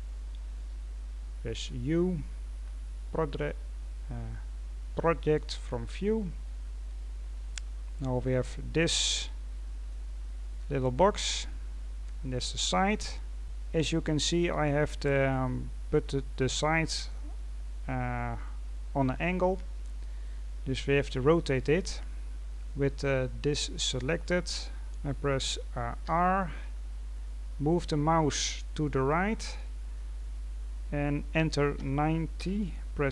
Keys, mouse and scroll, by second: 1.5 u, 7.7-8.5 scroll up 5, 8.5-9.1 scroll down 2, 9.1-10.5 drag, 10.5-11.1 scroll down 3, 12.9-13.3 scroll up 1, 13.3-17.4 scroll down 1, 17.7-19.1 scroll up 1, 21.6-21.9 scroll down 1, 21.9-22.3 scroll up 1.